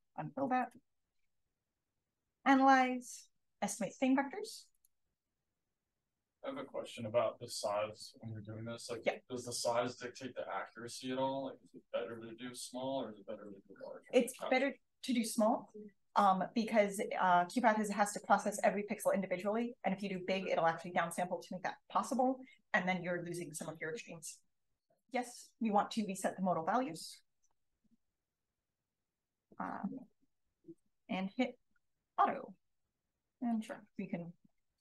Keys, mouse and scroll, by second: 0.1-5.2 scroll up 1, 5.2-10.3 scroll up 1, 10.3-15.4 scroll up 1, 15.4-25.7 scroll up 1, 25.7-27.4 scroll up 1, 27.4 click, 31.9 click, 33.4 click.